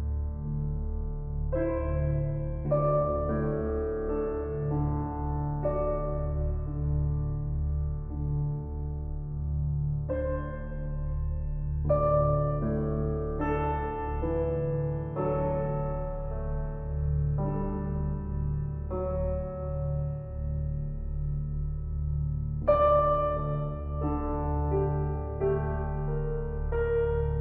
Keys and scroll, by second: 2.5 ].